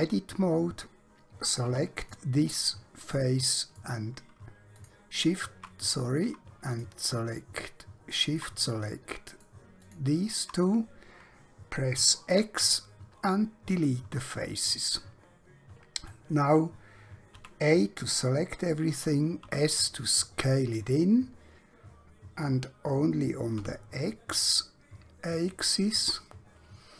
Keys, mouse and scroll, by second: 1.7 3, 1.9 click, 3.1 middle click, 4.9 alt+shift+click, 5.9 click, 6.9 shift+click, 7.6 shift+middle click, 8.7 middle click, 9.9 shift+click, 12.4 x, 13.7 click, 14.8 middle click, 17.3 a, 19.5 typing, 23.6 x.